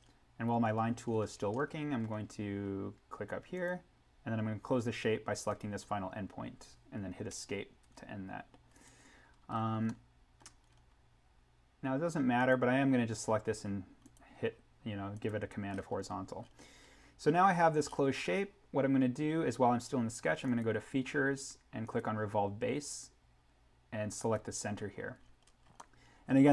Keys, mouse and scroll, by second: 3.5 click, 7.3 Escape, 8.7 click, 9.5 scroll up 1, 9.8 middle click, 10.6-12.3 scroll down 1, 12.3 click, 15.7-16.3 scroll up 1, 20.4 click, 25.2-25.7 scroll down 1, 25.8-26.5 middle drag.